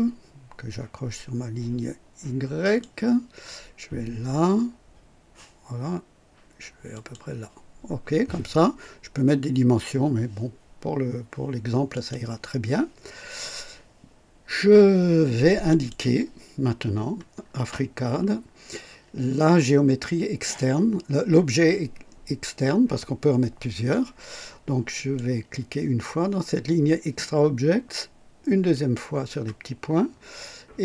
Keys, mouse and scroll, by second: 2.6 click, 6.8 click, 11.9 click, 15.6 click, 17.9 scroll down 2, 24.9 click, 28.7 click.